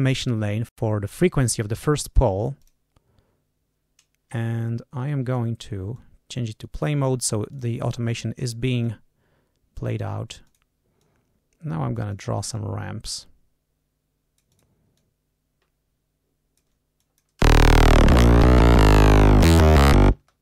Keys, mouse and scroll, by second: 2.5 click, 5.0 click, 5.8 click, 7.2 d, 7.4 click, 8.7-10.6 drag, 10.9-12.3 drag, 12.4-14.7 drag, 14.9-16.7 drag, 16.9 click, 17.3 space, 20.0 space.